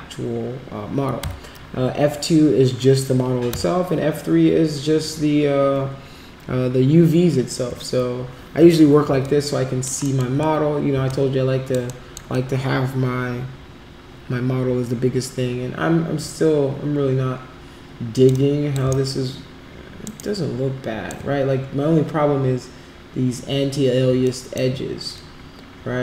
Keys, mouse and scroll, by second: 9.2 alt+click, 10.0 alt+middle click, 11.1 alt+click, 11.9 alt+middle click, 12.3-18.2 alt+drag, 18.3 alt+click, 19.0-20.0 shift+right drag, 20.1 shift+right click, 24.2 alt+click.